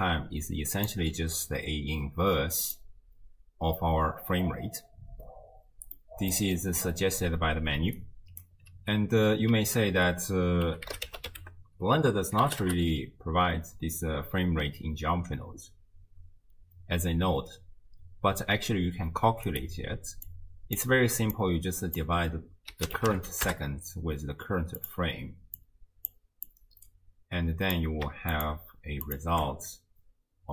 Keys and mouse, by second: 0.0 click, 0.9 d, 1.0 d, 2.7 click, 6.0 click, 7.8 d, 8.0 click, 8.4 d, 8.5 d, 8.6 d, 9.9 ctrl+a, 20.3 click, 21.4-24.9 drag, 25.6-26.1 drag, 26.5-27.8 drag, 28.3 ctrl+shift+click, 29.1 ctrl+shift+click.